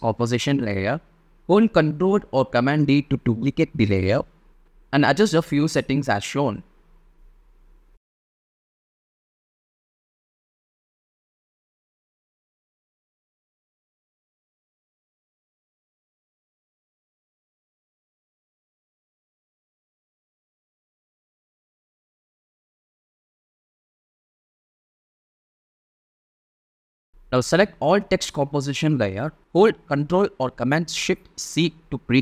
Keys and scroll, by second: 0.3 shift+super+d, 6.3 space, 9.4 space, 10.4 super+space, 10.8 super+d, 20.0 n, 24.3 space, 28.6 space, 29.6 shift+space, 31.7 ctrl+shift+super+c.